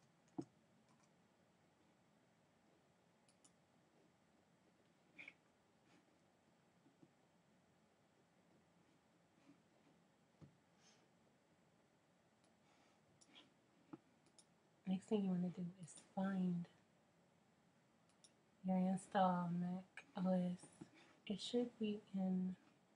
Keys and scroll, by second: 0.0-1.2 typing.